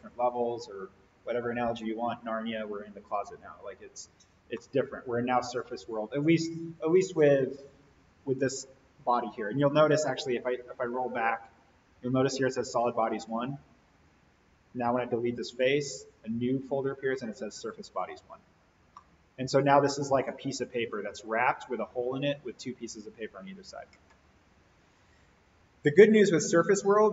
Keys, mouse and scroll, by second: 4.6-5.8 middle drag, 10.6-11.3 drag, 14.3-15.6 drag, 18.9 scroll down 1, 19.0-20.2 middle drag, 20.4-22.3 scroll up 1.